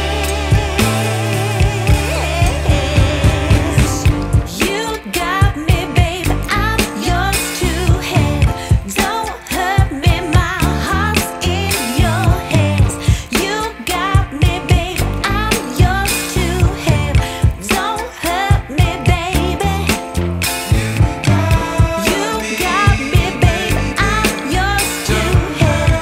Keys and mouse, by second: 0.9 click, 3.9-6.4 typing, 4.6 click, 4.9 click, 5.7 click, 6.1 click, 9.0-10.8 typing, 10.8 click, 11.9-13.1 typing, 12.3 click, 15.2-16.0 typing, 15.4 click, 17.1 typing, 18.5 click, 22.3 click, 24.6 click, 24.9 z, 25.3 click.